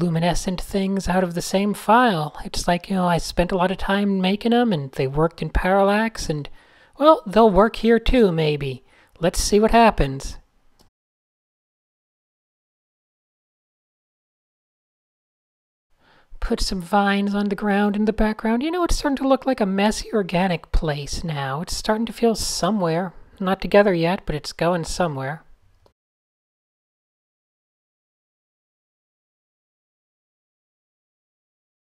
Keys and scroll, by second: 1.3 super+z, 3.8 d, 5.6 d, 5.9 Tab, 7.1 super+z, 9.1 Tab, 9.7 n, 10.3 super+z, 11.5 super+z, 11.5 Tab, 14.0 Tab, 16.9 Tab, 17.5 Tab, 18.4 Tab, 25.8 Tab, 26.0 Tab, 28.9 n, 30.4 super+z.